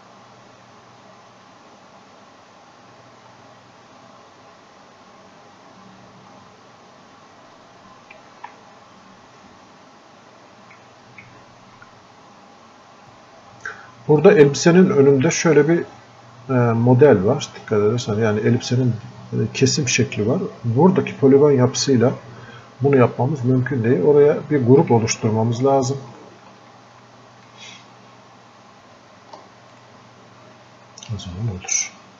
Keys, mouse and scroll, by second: 4.8 click, 5.8-9.9 drag, 9.9-11.4 drag, 11.4 alt+click, 12.1-24.0 drag, 24.0-25.2 drag, 25.2 alt+click, 25.8 click, 26.9 alt+click, 28.2 click, 29.2 ctrl+shift+click.